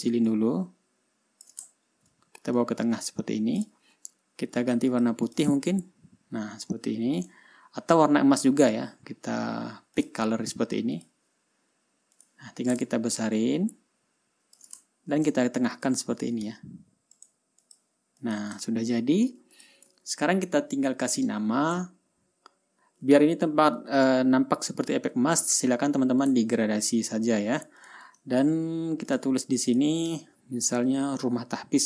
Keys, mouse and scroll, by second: 0.8-2.1 ctrl+shift+drag, 2.3 ctrl+shift+scroll up 2, 3.1-4.3 drag, 5.4 click, 5.8 ctrl+click, 6.2 ctrl+scroll down 2, 6.7-7.2 ctrl+scroll up 4, 7.7 click, 10.5 click, 11.5 click, 12.7 click, 13.9-15.2 ctrl+shift+drag, 15.3 ctrl+shift+scroll down 2, 16.3 shift+click, 17.7 click, 18.2 click, 18.7 click, 19.2-19.8 ctrl+scroll down 2, 20.1 ctrl+click, 20.7-22.2 ctrl+scroll up 1, 22.4-23.1 ctrl+scroll up 3, 23.1 ctrl+scroll down 2, 24.2-24.7 scroll up 1, 24.7 ctrl+scroll down 2, 25.1 ctrl+scroll up 2, 26.9 ctrl+scroll down 2, 27.2 ctrl+scroll up 2, 27.8 ctrl+scroll down 2, 28.3 ctrl+click, 29.6 click, 30.2 click.